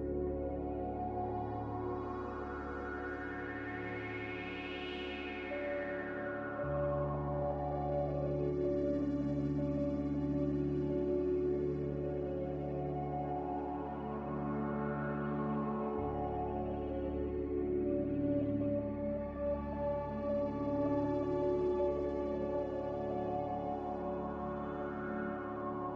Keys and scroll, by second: 0.4 z, 18.5 g, 21.1 Escape, 21.3 Escape, 21.4 Escape, 21.4 Escape, 24.7 z.